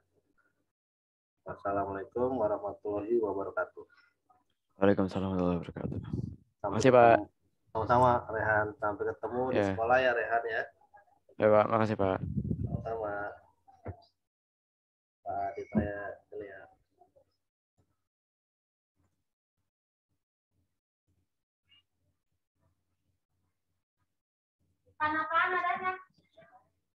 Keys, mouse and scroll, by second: 19.5 click.